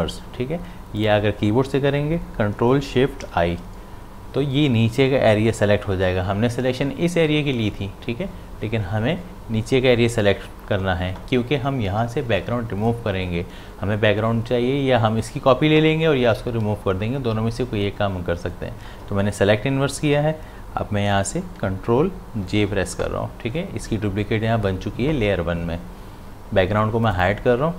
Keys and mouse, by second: 1.0 click, 3.2 ctrl+shift+i, 21.6 ctrl+shift+i, 22.5 ctrl+j, 27.1 click.